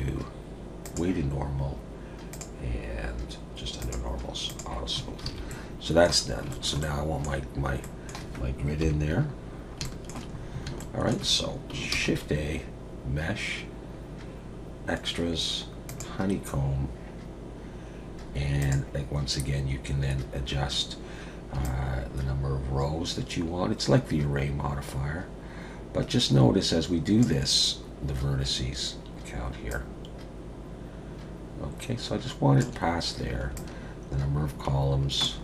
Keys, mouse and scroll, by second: 2.3 click, 2.6-3.8 scroll down 4, 3.8 click, 4.5 click, 5.0 scroll up 2, 5.3 alt+a, 5.5 middle click, 6.2 scroll down 2, 6.5 shift+middle click, 6.8 middle click, 7.8 middle click, 8.8 KP_7, 9.5-9.8 scroll down 3, 9.8 shift+middle click, 10.4-10.8 scroll up 3, 10.8 shift+middle click, 11.9 shift+a, 18.6 click, 21.6 shift+click, 29.7 shift+click, 33.5 shift+click.